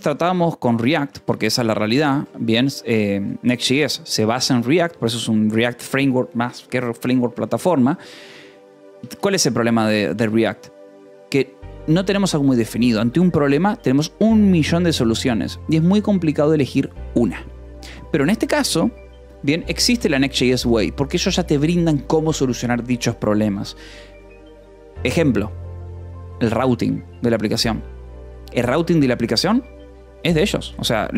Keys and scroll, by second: 0.0-3.0 typing, 1.3 Escape, 8.4-9.5 typing, 9.6 Escape, 20.1 e, 30.4 e, 30.7 space.